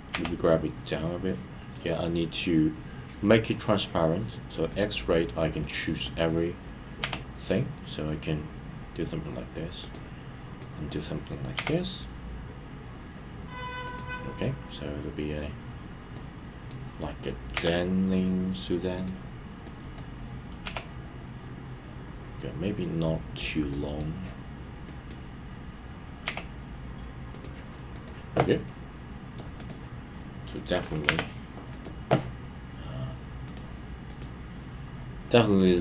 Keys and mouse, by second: 1.6 right click, 3.5 click, 5.8 click, 9.8 click, 10.8 click, 13.8 click, 16.3 click, 19.0 click, 19.8 click, 23.7 click, 25.0 click, 27.3 click, 28.6 middle click, 34.8 click, 35.6-35.8 middle drag.